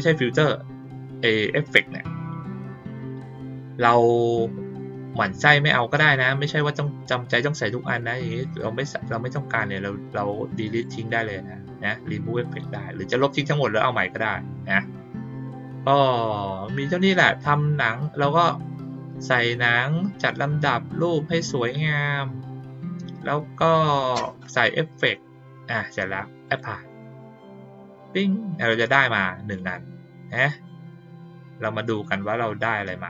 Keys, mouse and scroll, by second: 8.2 click, 10.6 right click, 15.3 click, 26.4 click, 28.5 click, 29.5-32.0 drag.